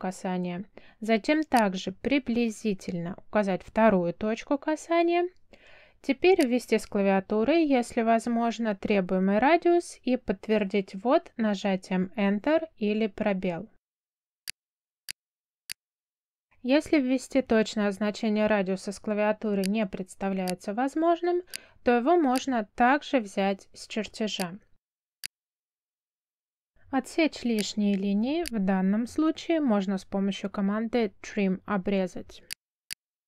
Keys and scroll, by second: 9.4 2, 11.7 Return, 18.4 c, 18.8 space, 30.0 t, 31.9 space.